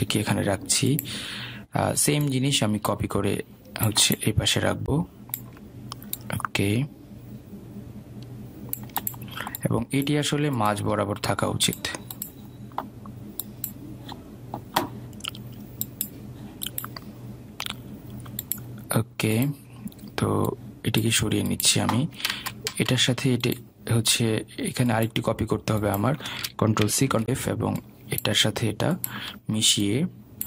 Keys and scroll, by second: 23.4 ctrl+z, 28.0 ctrl+c, 28.2 ctrl+f.